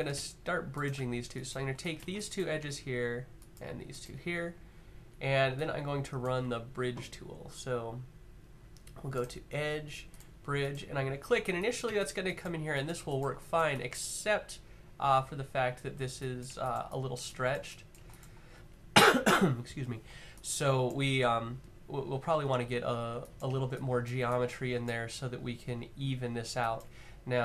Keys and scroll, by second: 8.0 typing.